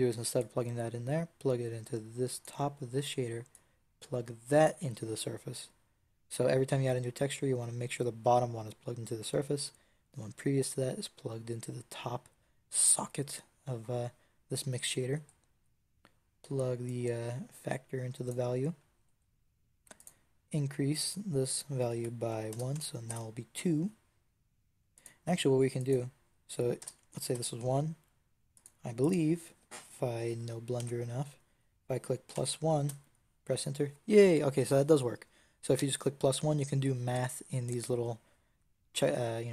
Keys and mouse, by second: 16.8-18.3 drag, 19.9-24.8 drag.